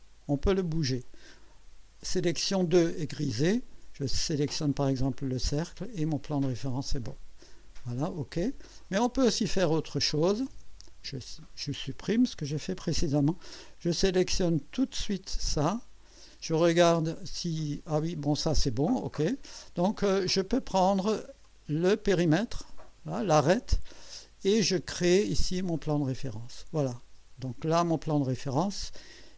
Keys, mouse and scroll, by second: 5.1 click, 8.3 click, 9.9 click, 11.4 ctrl+click, 12.4 Delete, 15.6 click, 17.2 click, 19.1 click, 21.4 click, 25.8 click, 27.5-28.7 drag.